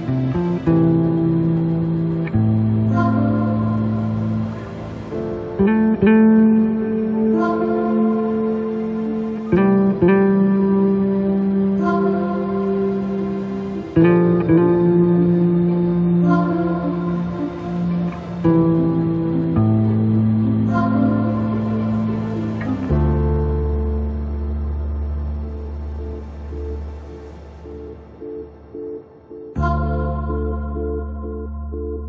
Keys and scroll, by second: 6.6 ctrl+z, 9.7 space, 17.9 space.